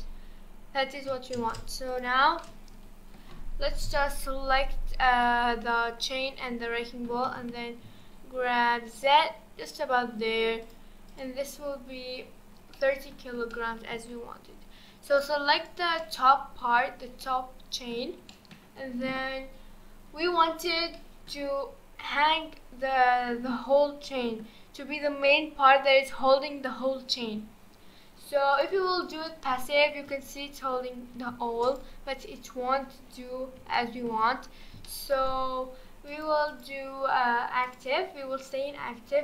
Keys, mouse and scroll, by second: 0.1-1.3 scroll down 3, 1.3 space, 1.9-2.4 drag, 2.4-3.8 middle drag, 3.8 KP_1, 4.5-5.2 scroll up 2, 5.2 drag, 6.3-7.3 scroll up 1, 7.3 g, 10.6 click, 11.1 click, 11.7-12.7 scroll up 2, 12.7-14.2 middle drag, 14.2-14.6 scroll up 4, 15.0 click, 15.6 click, 16.0-20.5 middle drag, 20.5-20.9 scroll down 4, 20.9-21.5 middle drag, 21.5-24.0 scroll down 3, 24.0-28.5 middle drag, 28.5-29.6 drag, 29.6 space, 31.3 space, 31.7 click, 32.2-32.8 scroll up 6, 32.8-33.7 scroll down 2, 33.7-36.1 shift+middle drag, 36.1 click, 36.5-39.2 drag.